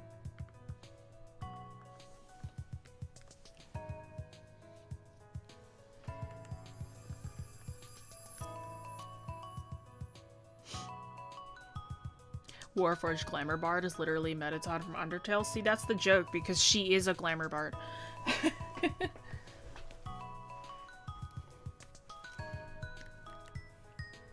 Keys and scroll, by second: 2.4-2.9 scroll, 6.4 scroll, 7.2 scroll, 16.0 scroll.